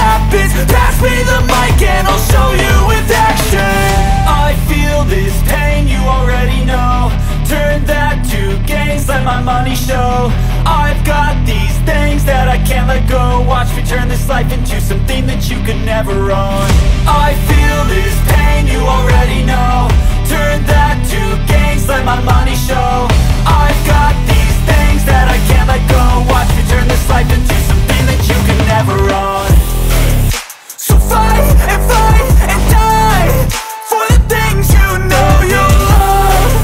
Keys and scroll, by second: 0.7 space, 1.6 p, 2.8 Return, 5.2 l, 7.0 Return, 7.4 r, 9.1 space, 9.6 p, 10.7 Return, 12.1 Return, 12.3 space, 15.2 r, 16.4 space, 17.0 p, 18.3 Return, 20.3 l, 21.7 Return, 22.2 r, 23.6 space, 24.2 p, 26.3 Return, 27.8 Return, 29.7 l, 32.1 space, 33.2 f, 34.5 Return, 35.1 l.